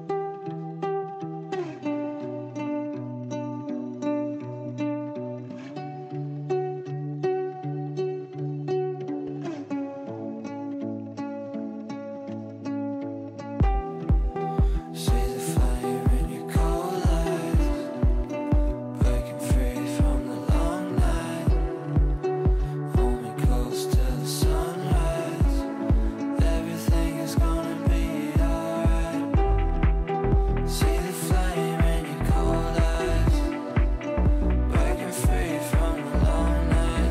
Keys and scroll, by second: 10.1 g, 34.3 Delete.